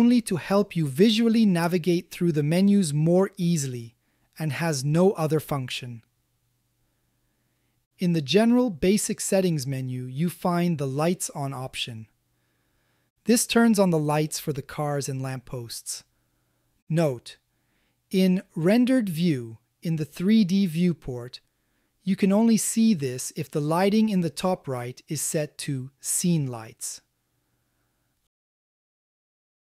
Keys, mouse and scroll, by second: 0.5 click, 2.1 click, 3.2 click, 4.0 click, 4.7 click, 5.5 click, 6.6 click, 8.0 click, 9.3 click, 12.3 click, 14.7 middle click, 15.7 shift+middle click, 16.4 middle click, 16.9-19.2 shift+middle drag, 21.3-29.0 drag.